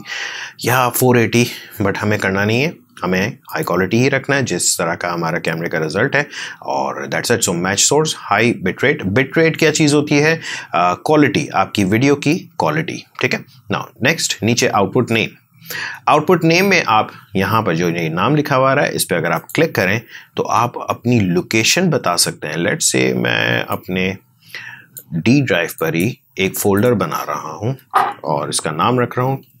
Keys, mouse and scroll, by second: 3.4 shift+click, 19.3 shift+click, 23.6-25.7 shift+drag, 28.8-29.6 typing.